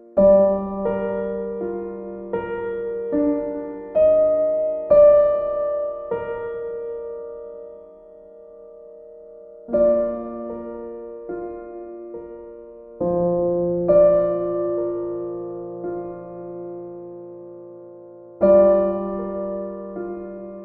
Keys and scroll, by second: 5.3 x.